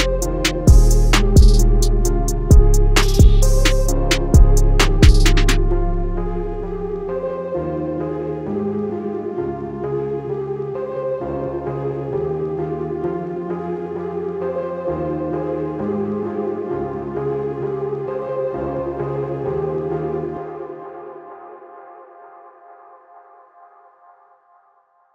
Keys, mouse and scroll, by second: 0.8 scroll down 1, 2.4 click, 9.3 click, 10.6 z, 11.1 click, 13.1 click, 18.4 BackSpace, 19.1 click, 20.1 click, 21.4 click.